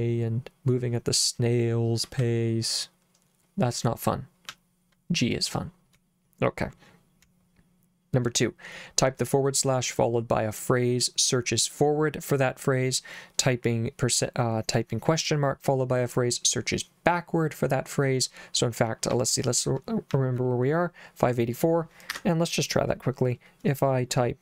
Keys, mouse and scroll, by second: 2.2 j, 4.5 j, 7.3 k, 19.1 k, 20.2 j, 22.1 Escape.